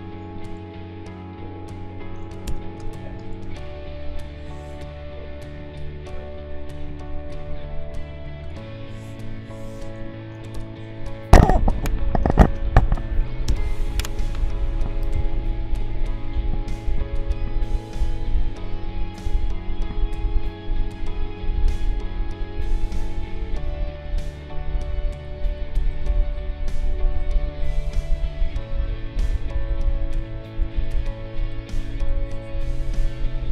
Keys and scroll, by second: 2.4 v, 10.5 b, 12.4 ctrl+shift+a, 13.4 b.